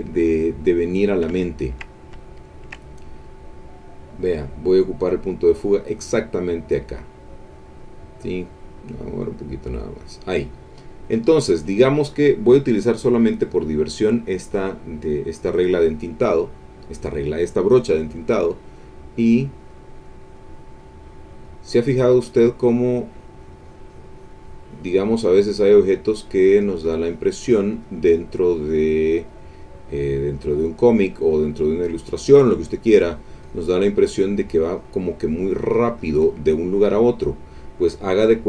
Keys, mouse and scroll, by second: 0.2 click, 0.9 middle click, 1.4-3.3 ctrl+middle drag, 5.2 click, 6.1-7.1 drag, 8.4-10.2 drag, 10.9 click, 12.8 click, 18.6 click, 19.2 click, 19.6 click, 20.0 click, 20.3-25.2 drag, 25.3 click, 25.6-29.8 drag, 29.9-33.9 drag, 34.2 click, 34.8-36.7 drag.